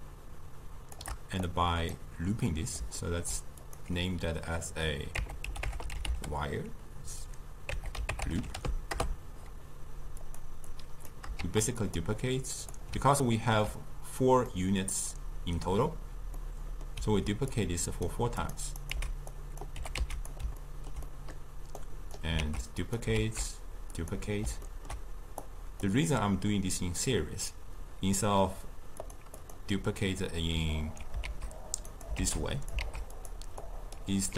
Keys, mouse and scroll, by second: 2.5-3.6 middle drag, 3.6-6.7 drag, 8.4 o, 10.3 click, 10.7 click, 11.4 shift+d, 12.7 click, 13.2-17.6 ctrl+middle drag, 17.6-18.5 drag, 18.8 click, 18.9 x, 19.4 click, 19.8 g, 20.6-21.9 ctrl+middle drag, 21.9 click, 22.4 shift+d, 23.2 shift+d, 24.7-25.4 ctrl+middle drag, 25.4-28.5 drag, 29.0 click, 29.4 click, 31.3 shift+d, 32.2 shift+d, 32.9 shift+d, 33.7 click.